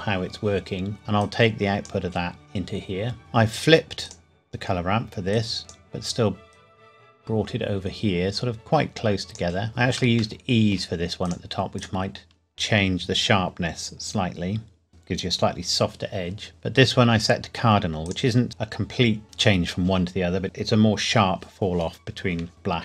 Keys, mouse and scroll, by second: 1.2 click, 9.7-10.2 scroll up 1, 10.4 shift+middle click, 11.3 click, 17.2 click.